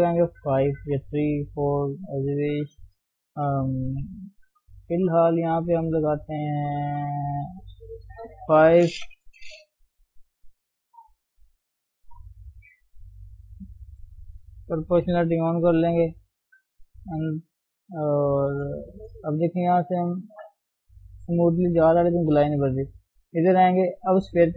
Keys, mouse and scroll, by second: 11.5 click, 12.4 shift+middle click, 13.3 g, 14.8 o, 15.6 g, 20.7 g.